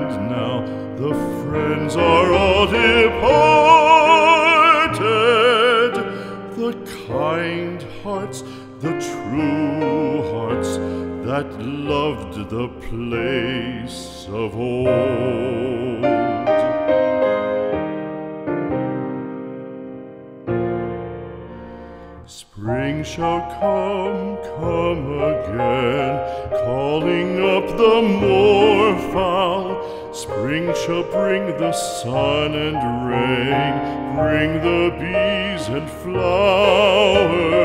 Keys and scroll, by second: 8.3 space, 10.3 p, 13.3 space, 17.1 ctrl+-, 18.9 space, 24.9 ctrl+-, 26.4 space, 33.9 ctrl+Return.